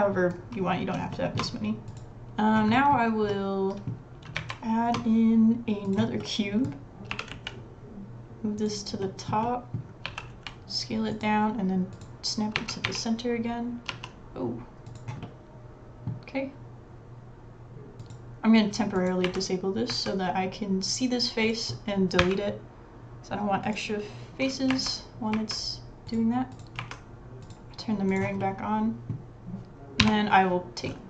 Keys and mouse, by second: 1.1 shift+middle click, 1.9 click, 2.7 middle click, 3.0 click, 3.3 middle click, 3.9 click, 4.4 shift+click, 4.4 shift+a, 6.2 middle click, 7.1 g, 9.0 middle click, 10.1 s, 12.6 g, 14.2 click, 15.2-16.0 middle drag, 18.0 click, 19.2 Tab, 19.9 Tab, 21.5 click, 22.2 Delete, 24.7 Tab, 25.4 Tab, 26.1 click, 26.8 Tab, 28.4 middle click, 28.6 middle click, 29.1 middle click, 30.0 l, 30.9 middle click.